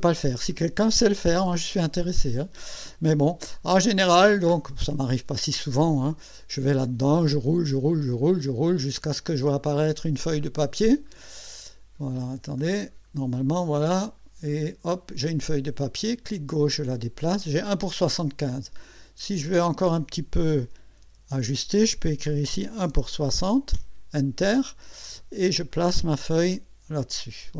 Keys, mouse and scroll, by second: 5.8 scroll up 2, 6.4-6.7 scroll up 2, 7.0-10.1 scroll up 14, 10.4-11.6 scroll up 6, 12.0-13.1 scroll up 6, 13.5-14.8 scroll up 6, 15.8-17.5 drag, 18.4 click, 21.0 BackSpace, 22.4 KP_6, 22.9 KP_0, 23.7 KP_Enter, 25.7-27.5 drag.